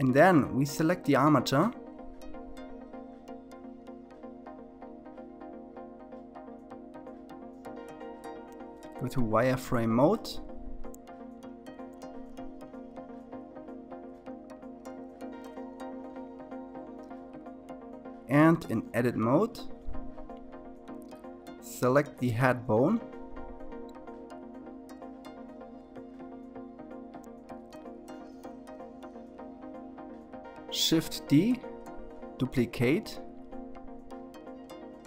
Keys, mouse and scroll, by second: 1.1 KP_3, 2.9-3.6 scroll up 2, 3.6-6.3 shift+middle drag, 7.0 shift+z, 8.6-11.0 scroll up 2, 14.4 click, 16.7-19.9 drag, 24.9 click, 30.0 shift+d, 32.9 s.